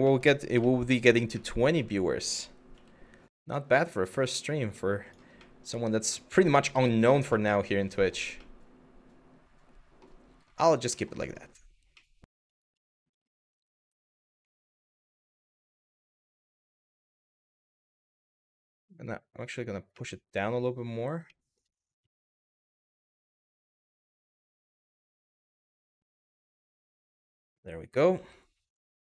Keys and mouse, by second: 0.3 shift+middle drag, 1.1-1.4 middle drag, 2.3 g, 4.7 click, 5.1 middle click, 5.8-6.2 middle drag, 6.5 shift+middle drag, 7.0-7.8 middle drag, 8.1-9.7 middle drag, 10.6 middle drag, 10.8 click, 11.6-12.1 middle drag, 12.7 click, 13.6 click, 14.1 shift+middle drag, 15.9 KP_1, 16.9 g, 17.6 z, 19.1 click, 19.7-20.2 middle drag, 20.9-21.2 middle drag, 21.6 KP_3, 22.7 r, 26.8 click, 27.8 g.